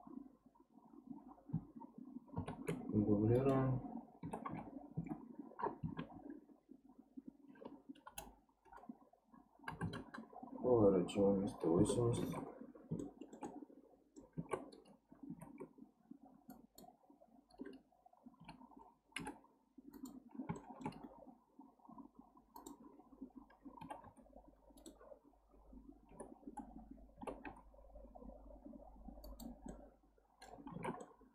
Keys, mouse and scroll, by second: 2.4 shift+d, 4.2 r, 12.2 alt+z, 13.0-14.4 shift+middle drag, 14.4 alt+z, 15.3 alt+z, 16.5 click, 18.4 a, 19.2 m, 20.6-22.6 shift+middle drag, 22.6 click, 23.8 g, 29.7-30.7 middle drag, 30.7 alt+z, 31.0-31.3 middle drag.